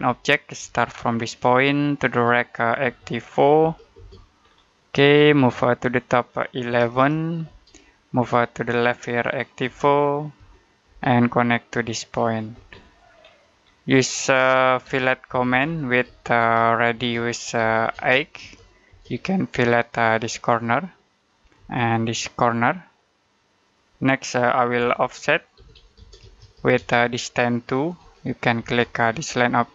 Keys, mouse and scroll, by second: 0.4 space, 1.2 click, 2.7-3.8 typing, 4.3-4.7 scroll down 1, 4.7 middle click, 6.6 1, 7.3 space, 9.5-10.7 typing, 12.1 click, 12.4 space, 12.6 middle click, 12.9-13.5 scroll up 1, 13.5-13.8 scroll down 1, 13.8 middle click, 14.7-18.8 typing, 20.0 click, 21.4 space, 22.2 click, 24.6-26.8 typing, 27.8 2, 28.5 space.